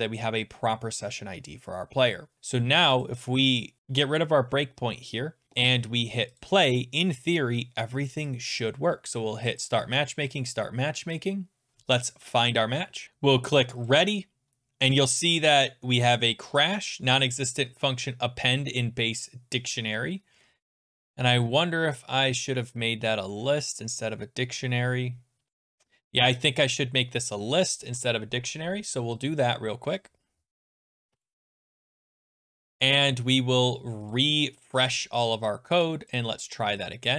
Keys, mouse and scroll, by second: 3.1 click, 6.4 click, 8.6 click, 9.7 click, 10.4 click, 11.7 click, 13.9 click, 20.1-21.7 scroll, 22.7-25.1 scroll, 27.3 click, 27.9 [, 29.9 click, 31.1-31.5 BackSpace, 34.1 click, 36.2 click, 36.9 click.